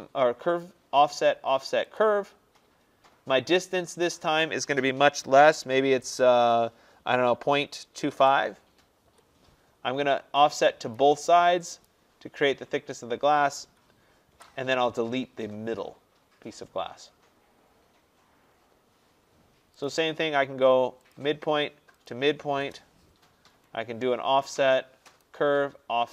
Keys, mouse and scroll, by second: 2.3 click, 4.1 click, 7.7-8.3 typing, 9.1 Return, 11.0 click, 11.9 click, 14.4 Delete, 17.4 middle click, 17.5 middle click, 19.9 click, 21.2 click, 22.1 click, 22.7 Return, 25.3 click.